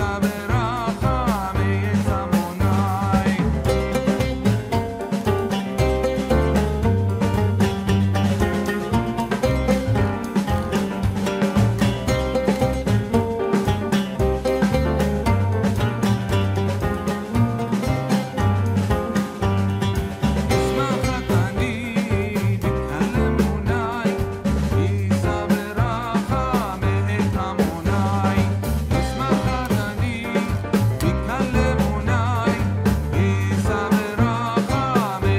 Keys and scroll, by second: 3.2 ctrl+z, 7.0 ctrl+t.